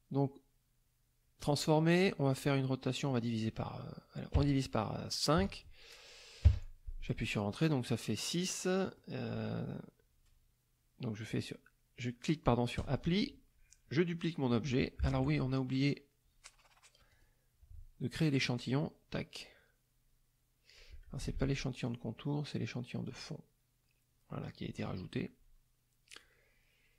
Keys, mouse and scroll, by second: 1.3 click, 3.0 click, 5.3 KP_5, 6.4 KP_Enter, 8.3 click, 12.7 click, 17.1 click, 18.5 click, 21.2 ctrl+z, 21.8 ctrl+click, 23.0 click.